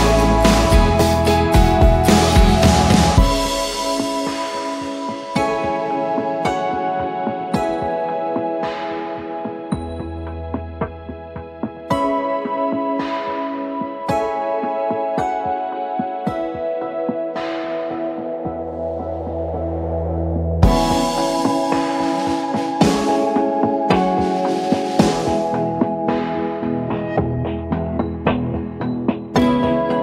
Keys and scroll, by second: 0.6-5.0 typing, 5.5 Return, 6.8 v, 8.0 ctrl+d, 8.5 Left, 10.5-12.1 typing, 18.5-19.3 typing, 21.3 ctrl+d, 21.5 Left, 21.6 Left, 21.7 Left, 22.6 Left, 24.0-25.3 typing, 26.0 Return, 27.2-30.0 typing.